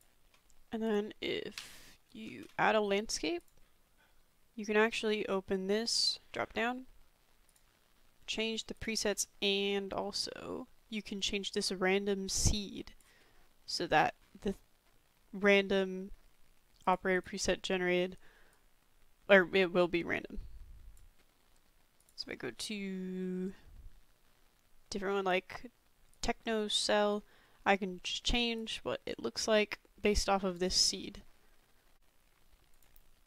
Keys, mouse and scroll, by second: 1.6 Delete, 2.5 shift+a, 7.5-9.1 drag, 12.5 click, 16.8 click, 18.8-21.2 drag, 22.0-26.4 drag, 27.2 click, 28.8-30.8 drag.